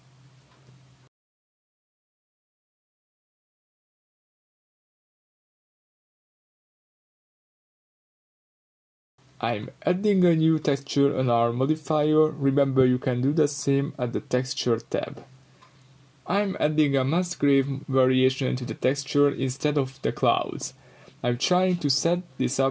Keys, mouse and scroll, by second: 0.5-2.3 middle drag, 2.3-3.8 drag, 3.8-5.6 middle drag, 5.6 click, 6.1-9.7 drag, 8.5-9.5 scroll down 2, 10.5 click, 11.6 click, 13.2-15.7 middle drag, 14.2 scroll up 2, 15.7-19.8 drag, 19.8-21.7 middle drag, 21.7-22.7 drag.